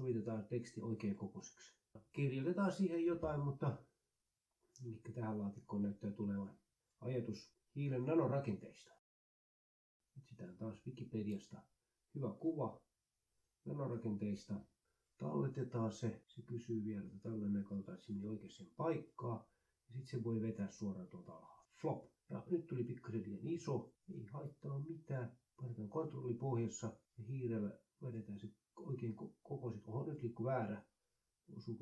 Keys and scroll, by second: 3.8-13.2 typing.